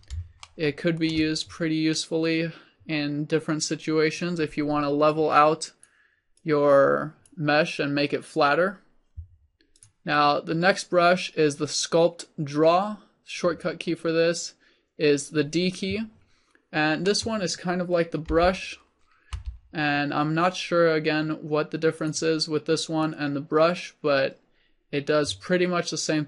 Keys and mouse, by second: 5.3-18.4 drag, 18.4 d, 19.4 f, 22.2 click, 22.9-26.2 drag.